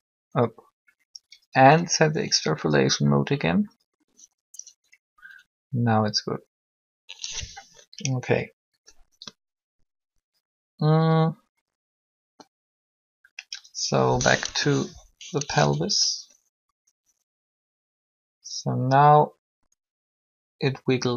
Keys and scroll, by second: 14.3 1.